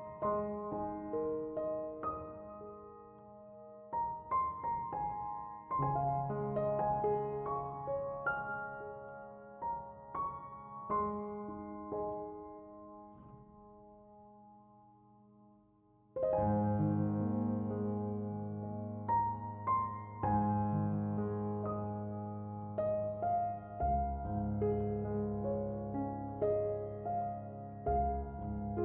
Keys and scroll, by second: 25.3 Escape.